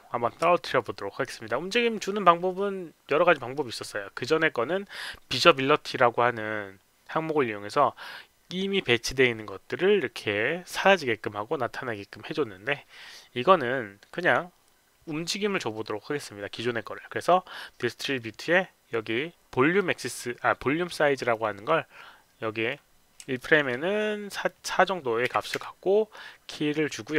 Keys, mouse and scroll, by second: 14.1 click, 21.3-22.6 drag, 23.3 alt+click, 24.4 click, 25.3 KP_4, 26.1 right click, 26.6 KP_4.